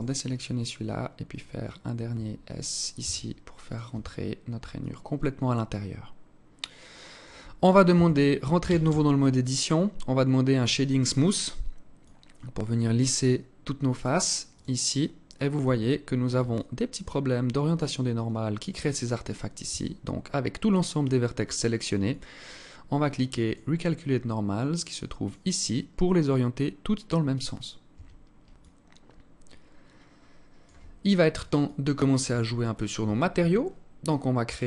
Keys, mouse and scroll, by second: 1.0 alt+shift+right click, 2.6 s, 3.5 Tab, 3.7 scroll down 7, 4.4 alt+click, 7.5 Tab, 8.2 a, 8.4 a, 11.6 click, 14.1 click, 15.2 Tab, 16.1 alt+click, 19.2 Tab, 21.6 click, 24.8 click, 27.5 Tab, 28.2 alt+click, 31.2 alt+click, 32.1-32.6 scroll up 3, 32.6 Tab, 33.0 Tab, 34.2 click.